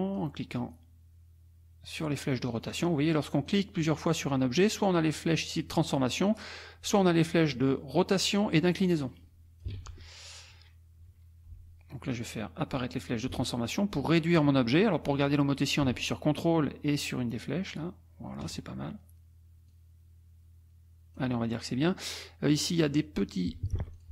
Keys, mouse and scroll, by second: 0.7-2.2 drag, 2.6 click, 3.5 click, 4.1 click, 6.3 click, 7.7 click, 9.0 click, 9.7 ctrl+z, 12.1 click, 13.3-18.6 ctrl+drag, 19.7-21.4 drag, 23.8 F2, 23.9 click.